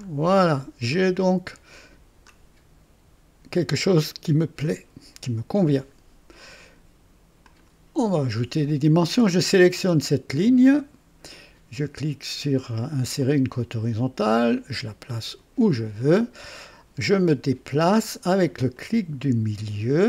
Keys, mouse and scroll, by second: 0.0-0.4 scroll down 2, 0.9-2.5 middle drag, 7.4 click, 10.4 click, 13.2 click, 14.2-15.8 drag, 17.1-17.6 scroll down 1, 18.7-20.0 middle drag.